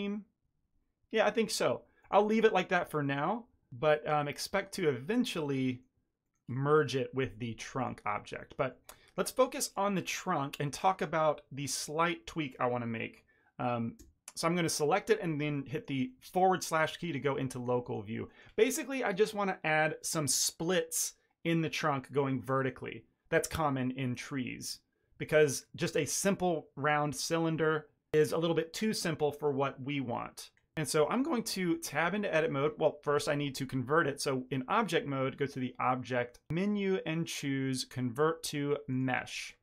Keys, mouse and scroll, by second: 2.1 a, 2.6 shift+middle click, 3.0 ctrl+middle click, 4.5 shift+middle click, 5.3 shift+middle click, 5.6 ctrl+middle click, 6.1 middle click, 7.7 click, 8.1 shift+middle click, 8.3 ctrl+middle click, 8.9 middle click, 8.9 shift+middle click, 9.3 ctrl+middle click, 13.9 KP_Divide, 15.4 middle click, 16.0 shift+middle click, 16.3 ctrl+middle click, 16.6 ctrl+middle click, 16.9 shift+middle click, 17.4 middle click, 17.7 ctrl+middle click, 18.2 middle click, 25.0-25.5 ctrl+middle drag, 31.3 Tab, 31.6-32.2 ctrl+middle drag, 33.0 Tab, 34.7 click.